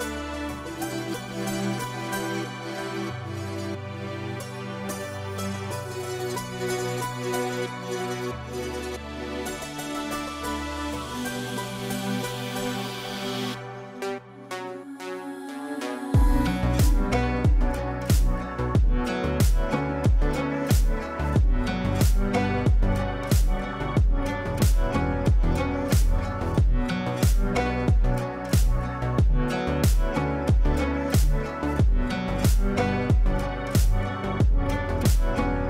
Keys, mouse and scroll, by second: 3.8 right click, 4.9 click, 8.7 c, 9.2 click, 11.4-15.5 shift+drag, 17.8 ctrl+z, 19.6-25.5 drag, 28.9 click, 31.8 click, 32.0-34.9 drag, 33.6 click, 34.9 ctrl+k, 35.4 click.